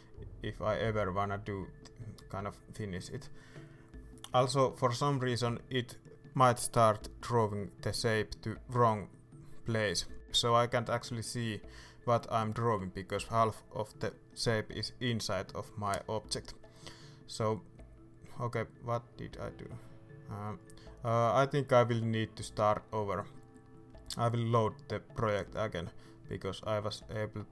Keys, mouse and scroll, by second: 0.4-1.3 scroll up 1, 1.3 middle click, 2.1-3.2 scroll down 1, 3.2 scroll up 1, 3.7 ctrl+z, 8.8 ctrl+z, 10.2 scroll up 1, 10.8 Return, 10.8-12.3 middle drag, 12.3-15.6 drag, 16.0-18.1 drag, 18.1-18.5 scroll down 2, 18.5 ctrl+z, 18.9 scroll up 2, 19.1 Escape, 19.9 scroll down 2, 20.2 middle click, 20.4 scroll up 2, 20.6 ctrl+z, 20.9 middle click, 21.6 shift+s, 22.3 right click, 22.7 scroll down 2, 22.9 middle click, 23.1 scroll up 2, 23.3 middle click, 23.3 shift+z, 23.8-25.2 scroll up 2, 25.2-27.5 drag.